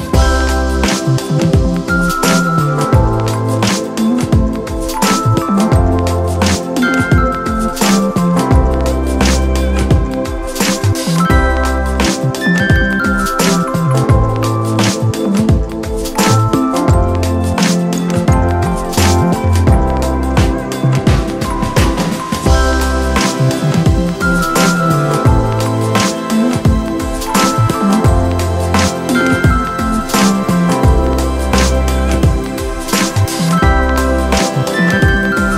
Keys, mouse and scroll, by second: 9.0 ], 23.6 ].